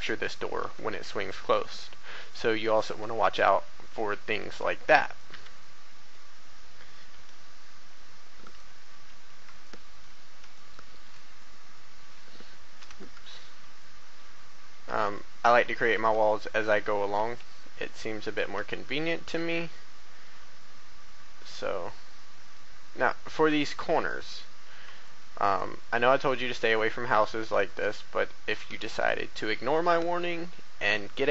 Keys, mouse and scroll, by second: 1.1 scroll down 1, 1.8 shift+middle click, 3.0-5.8 drag, 3.9 a, 4.4 b, 5.8 e, 6.3 x, 7.0 y, 8.4 click, 8.9 a, 9.6 shift+middle click, 10.5 shift+middle click, 11.3 middle click, 12.7 7, 13.2-13.5 scroll down 1, 15.1 shift+middle click, 16.6 right click, 16.8 a, 17.2 b, 17.3 click, 18.5 e, 19.1 x, 23.4 click, 24.3 a, 25.0 shift+middle click, 25.8 scroll up 1, 26.7 shift+middle click, 28.6 b, 29.0-30.2 drag.